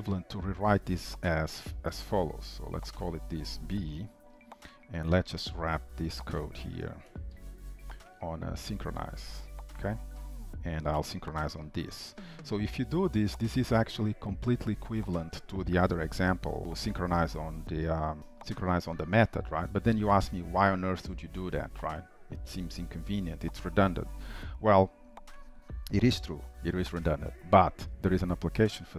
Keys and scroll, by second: 1.2 ctrl+shift+Right, 7.5 ctrl+alt+t, 7.9 ctrl+alt+t, 16.1 Delete, 18.3 ctrl+s.